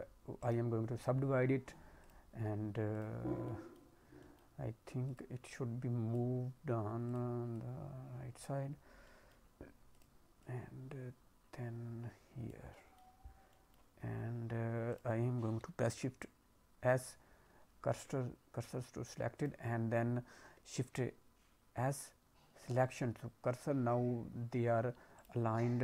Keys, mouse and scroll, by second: 0.4 right click, 2.0 click, 2.9 click, 3.4 middle click, 4.1 middle click, 5.0 click, 5.5 click, 7.0 click, 7.5 click, 8.9 scroll up 1, 9.0 middle click, 9.9 click, 10.4 click, 12.6 middle click, 13.2 scroll up 2, 13.4 middle click, 14.8 click, 15.9 shift+s, 19.3 click, 21.7 shift+s, 24.3-24.7 scroll down 1, 25.1 click.